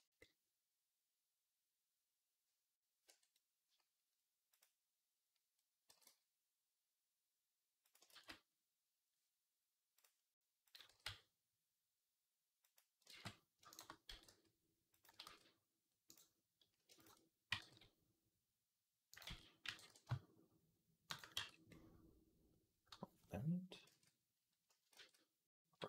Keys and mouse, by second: 2.9 Tab, 5.7 g, 7.9 ctrl+z, 10.7 g, 12.9 ctrl+z, 13.9 g, 15.1 ctrl+z, 17.3 g, 19.1 ctrl+z, 19.5 g, 20.4 shift+right click, 21.0-22.4 middle drag, 21.2 Tab, 23.7 ctrl+z, 24.8 ctrl+z.